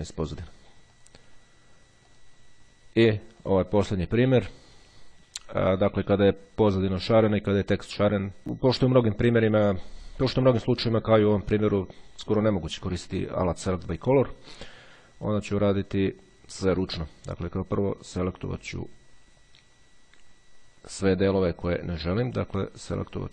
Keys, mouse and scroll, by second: 1.0 click, 2.0 click, 3.6 click, 16.6-21.6 drag, 23.2-23.3 drag.